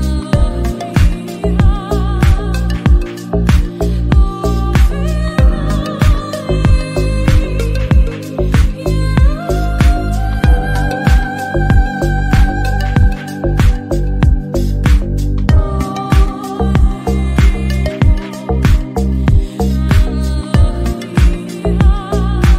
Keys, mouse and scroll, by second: 0.9 alt+z, 1.1 middle click, 1.4 g, 1.8 Tab, 2.1 g, 2.5 shift+middle click, 2.7 scroll up 2, 2.7-3.1 middle drag, 3.1 click, 3.2 Tab, 3.6 middle click, 3.9 alt+click, 4.2 s, 5.2 scroll down 1, 5.3 Tab, 5.5-5.8 middle drag, 5.8-6.2 scroll down 1, 6.2 scroll up 1, 6.3 middle click, 6.5 KP_1, 6.8 Tab, 6.9 alt+z, 7.0 click, 7.4 s, 8.5 g, 9.3 s, 9.6 Tab, 9.7 middle click, 9.8 alt+z, 10.9 middle click, 11.1 KP_1, 11.6-11.9 scroll up 1, 11.9 Tab, 12.3 3, 12.5 shift+middle click, 12.8 alt+click, 13.1 shift+middle click, 13.7 shift+d, 13.9 p, 14.2 Tab, 14.3 click, 15.1-16.6 drag, 17.2-17.6 shift+middle drag, 17.6 scroll up 1, 17.7-18.2 middle drag, 18.2 KP_1, 18.4 alt+z, 18.7 Tab, 19.0 1, 19.1 click, 19.6 g, 20.4 alt+z, 20.4 middle click, 20.8 s, 21.4 middle click, 21.5 Tab, 21.6 middle click, 21.8 click, 21.8 Tab.